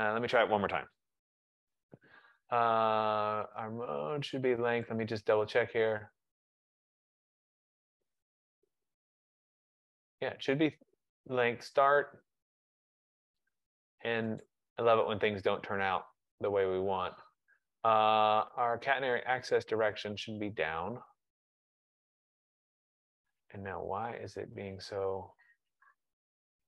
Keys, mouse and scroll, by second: 0.8-1.9 typing, 5.1 click, 8.0 click, 10.1 click, 13.0 click, 14.5 click, 21.0 click.